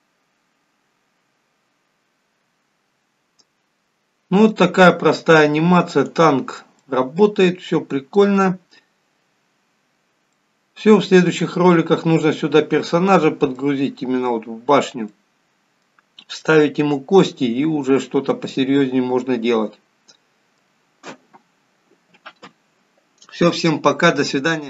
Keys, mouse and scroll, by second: 6.2 click, 6.7 middle click, 10.0-10.7 scroll down 2, 10.7 middle click, 11.7 scroll up 4, 12.6-13.0 scroll down 2, 13.5 middle click, 15.0 middle click, 16.3 middle click, 18.0 middle click.